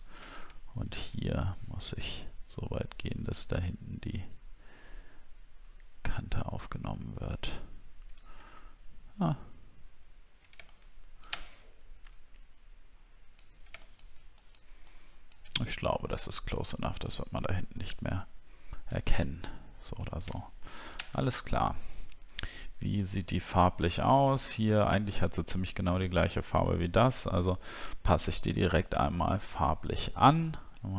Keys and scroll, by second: 0.6 alt+scroll down 1, 8.5 alt+scroll up 1, 9.9-10.6 alt+scroll up 1, 19.0 alt+scroll down 1, 19.7 alt+scroll down 1, 21.1-22.2 alt+scroll down 7, 26.7 alt+Tab.